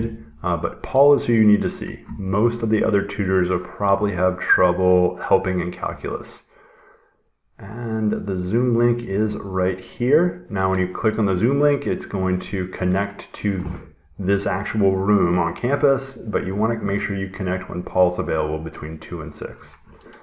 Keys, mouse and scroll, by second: 0.0 click, 1.0 scroll, 6.4 scroll, 8.1 scroll, 13.3 click.